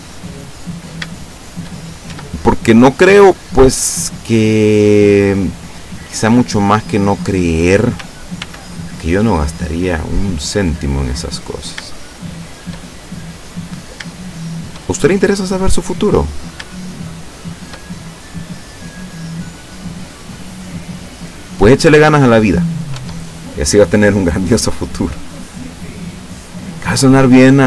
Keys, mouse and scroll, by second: 0.7-1.2 scroll up 1, 1.2-1.8 shift+middle drag, 2.1 shift+Tab, 2.9-5.0 middle drag, 5.1-7.4 middle drag, 8.4 ctrl+r, 9.1 ctrl+click, 9.4 click, 10.0 middle click, 11.5 right click, 12.1 shift+right click, 12.5 shift+right click, 12.9-14.1 shift+middle drag, 14.6 shift+right click, 15.0-16.7 shift+middle drag, 17.5 shift+right click, 17.9 shift+middle click, 19.4-21.2 drag, 21.2 scroll up 1, 21.3-23.1 middle drag, 23.0 Tab, 23.8 scroll down 1, 24.7 scroll down 1, 25.4-26.8 middle drag, 26.8 scroll down 1, 27.0 scroll up 1, 27.2-27.6 middle drag.